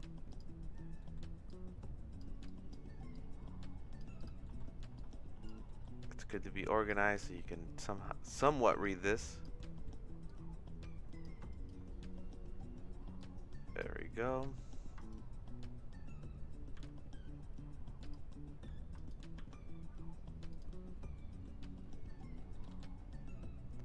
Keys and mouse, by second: 1.0 middle click, 1.5 click, 2.4 click, 3.1 click, 4.2 click, 4.4 middle click, 5.0 click, 5.7 middle click, 6.3 click, 7.1 middle click, 7.8 click, 8.8 click, 9.6 middle click, 10.3 click, 13.2 click, 14.2 middle click, 15.1 shift+right click, 16.9 g, 19.1 shift+right click, 19.5 g, 21.1 middle click, 22.5 middle click.